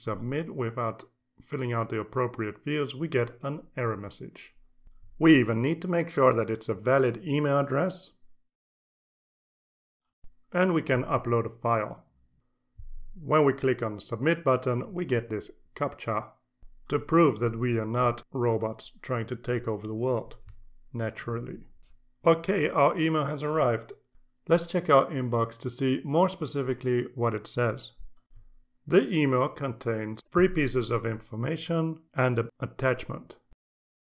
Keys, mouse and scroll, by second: 0.8 click, 2.1 click, 2.8 click, 4.1 click, 5.3 a, 5.8 d, 6.1 click, 7.4 click, 7.8-10.3 typing, 10.2 click, 11.0 click, 12.0 click, 15.7 click, 18.1 click, 20.7 click, 24.6 click, 33.7 click.